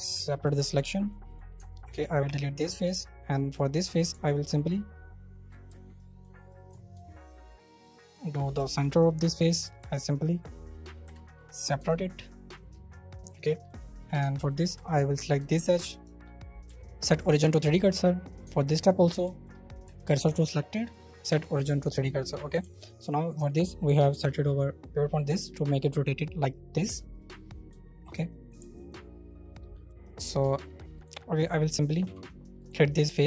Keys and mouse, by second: 0.1 Tab, 0.3 middle drag, 0.5 b, 1.0 middle drag, 1.3 middle click, 1.5 Tab, 2.2 x, 2.9 middle click, 4.6 right click, 5.7 z, 6.1 right click, 6.6 ctrl+middle click, 6.9 ctrl+r, 8.0 right click, 8.5 shift+middle click, 9.2 3, 11.0 p, 11.7 Tab, 11.9 middle click, 12.8 middle click, 14.1 Tab, 15.1 2, 15.3 shift+middle click, 16.0 shift+middle click, 16.6 w, 17.5 shift+middle click, 18.0 middle click, 18.4 Tab, 19.2 shift+middle drag, 19.8 w, 20.2 Tab, 21.0 click, 21.3 y, 21.7 middle click, 22.6-23.0 alt+middle drag, 23.3 e, 24.1 r, 26.8 Escape, 27.1-27.7 right drag, 27.2 c, 27.7 shift+middle click, 28.3 right click, 28.6 alt+middle click, 30.4 shift+middle click, 30.6 middle click, 30.9 middle click, 32.0 x, 33.0 middle click.